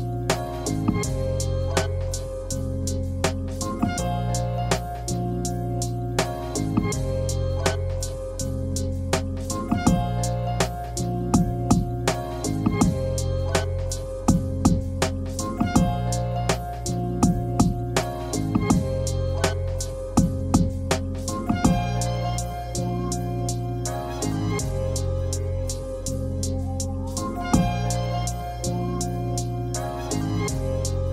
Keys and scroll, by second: 0.0-2.3 typing, 3.5-4.1 typing, 5.4-6.6 typing, 7.6 r, 9.1 w, 11.0-11.7 typing, 12.8 Escape, 13.3 r, 14.3 space, 18.7 1, 20.8 ctrl+z, 23.7 7, 24.7 5, 26.4 7, 27.8-28.5 typing, 29.9 m.